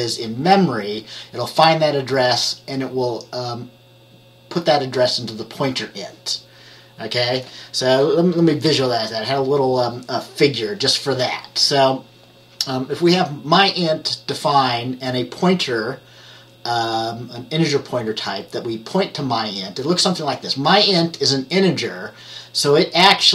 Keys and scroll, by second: 8.7 Page_Down.